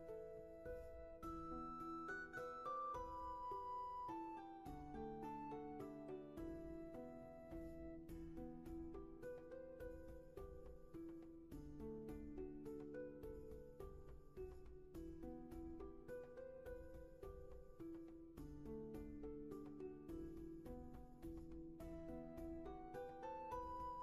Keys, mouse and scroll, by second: 1.5 ctrl+z, 5.3 ctrl+z, 20.1 ctrl+z, 21.5 ctrl+shift+z.